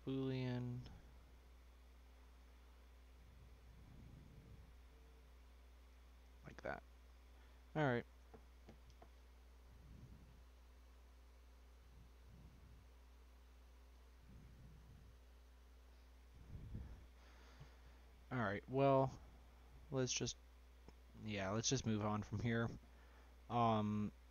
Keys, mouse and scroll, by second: 3.3-4.3 middle drag, 4.3-6.4 scroll up 1, 6.4-7.4 middle drag, 7.4-8.2 scroll down 2, 8.2-10.5 scroll down 3, 18.0-20.9 middle drag, 20.9 scroll up 1, 21.1 middle click, 21.8-22.2 scroll down 1, 22.2 scroll up 1, 22.3-24.3 middle drag.